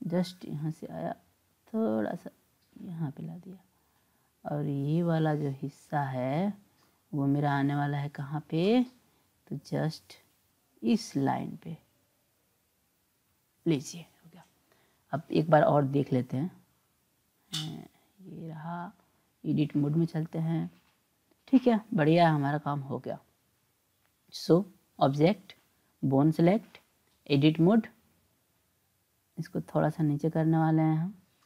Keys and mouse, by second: 0.1 click, 1.3-3.1 drag, 5.3 click, 6.2 click, 8.3 click, 10.1-13.6 drag, 16.1-17.1 drag, 17.6 click, 18.7-20.0 drag, 23.6-25.2 drag, 25.8 click, 26.8-27.9 drag, 29.6 click, 31.0 click.